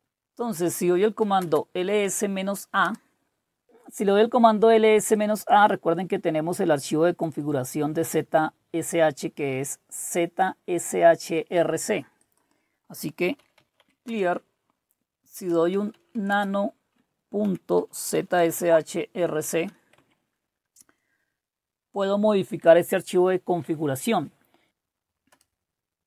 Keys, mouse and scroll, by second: 0.0 typing, 1.3-2.6 typing, 2.8 Return, 5.1-7.3 drag, 7.5 click, 12.2 click, 12.8-20.2 typing, 25.3 Return.